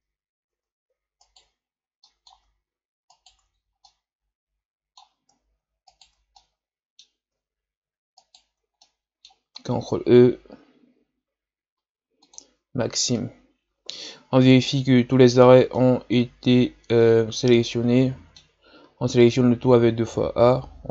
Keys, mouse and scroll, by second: 1.2 alt+shift+right click, 2.0-3.1 middle drag, 3.1 alt+shift+right click, 3.6 scroll down 1, 3.8-5.9 middle drag, 5.9 alt+shift+right click, 6.4-8.2 middle drag, 8.2 alt+shift+right click, 8.8-9.9 middle drag, 9.9 ctrl+e, 13.1-18.5 middle drag, 18.5 a, 18.8 a.